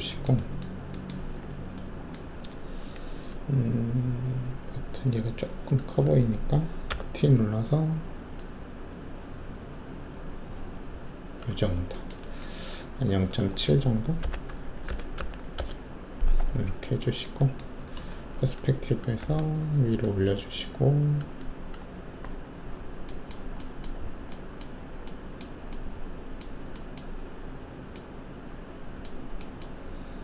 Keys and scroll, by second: 2.6 alt+w, 6.9 t, 14.2-15.1 typing, 15.5 Return, 18.1 alt+shift+q, 19.2 w.